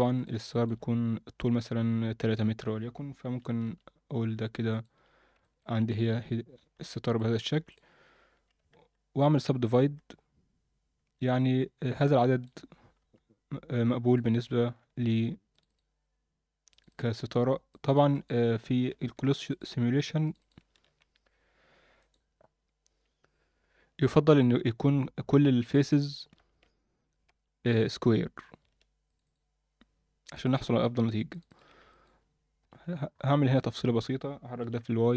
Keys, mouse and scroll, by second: 0.1 shift+click, 0.5 alt+shift+middle click, 3.6 g, 4.9 Tab, 5.4 shift+middle drag, 5.9-6.3 scroll up 2, 6.2 Tab, 6.8 ctrl+r, 8.3 a, 8.7 ctrl+w, 9.2 ctrl+w, 9.7 ctrl+w, 12.2 middle drag, 12.6 scroll up 1, 13.0 2, 14.2 click, 15.5 shift+click, 15.7 shift+click, 16.7 shift+click, 16.9 shift+click, 17.7 shift+click, 18.1 shift+click, 19.3 shift+click, 19.5 shift+click, 20.4 shift+click, 25.6 click, 25.8 shift+click, 26.6 ctrl+z, 27.3 ctrl+z, 29.0 shift+click, 29.2 shift+click, 30.4 shift+click, 31.3 shift+click, 31.5 shift+click, 31.9 alt+middle click, 32.6 KP_7, 33.1-34.6 scroll up 3, 33.5 alt+shift+middle click, 34.6-34.9 scroll up 1, 34.6 g.